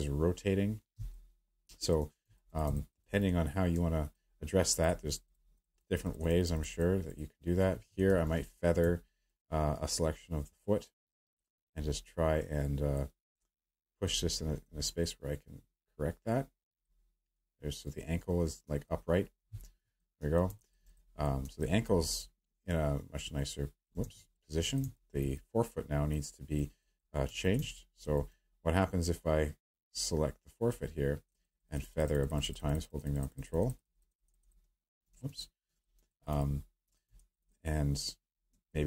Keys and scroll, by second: 0.9-2.0 space, 8.1 w, 19.6 q, 24.0 ctrl+z, 35.1 ctrl+z.